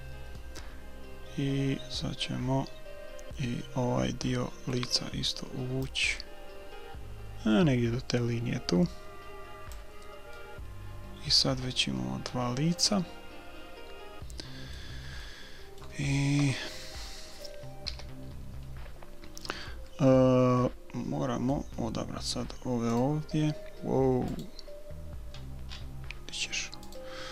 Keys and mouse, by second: 0.3-2.4 middle drag, 5.9-7.8 drag, 10.4-12.4 middle drag, 15.1-16.9 middle drag, 16.4 KP_1, 17.9 a, 19.0-23.0 middle drag, 23.0-24.8 drag, 23.0 right click, 25.4 middle click, 26.3 click, 27.0 middle click.